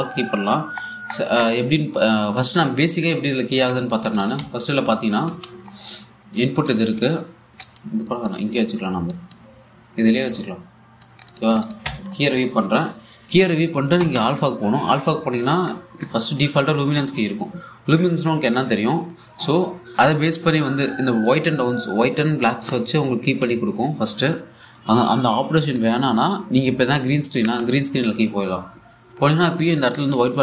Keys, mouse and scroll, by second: 1.4-2.1 scroll down 1, 2.1 click, 2.7-3.3 scroll down 1, 4.7-5.1 scroll down 1, 5.1 1, 5.6-5.9 scroll down 1, 5.9 a, 6.3-6.9 scroll up 1, 7.3 click, 8.1 scroll down 1, 8.3 alt+click, 12.5 1, 13.0 click, 14.6 a, 26.3 click, 28.2 click, 30.2 click.